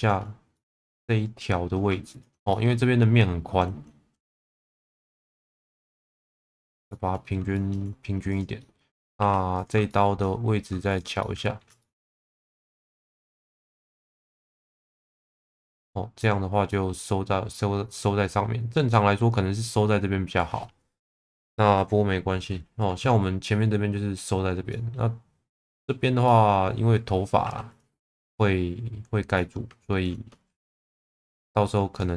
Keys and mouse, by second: 0.6 middle click, 1.0 shift+middle click, 2.5 shift+middle click, 4.5 shift+v, 6.5 click, 6.9 middle click, 7.6 shift+middle click, 8.4 click, 8.6 middle click, 9.2 2, 9.9 shift+middle click, 11.2 alt+middle click, 11.8 shift+middle click, 13.8 shift+middle click, 14.8 middle click, 15.6 click, 16.2 middle click, 16.7 middle click, 18.0 middle click, 18.9 middle click, 24.7 middle click, 25.5 middle click, 26.3 middle click, 27.4 1, 28.0 middle click, 29.4 alt+middle click.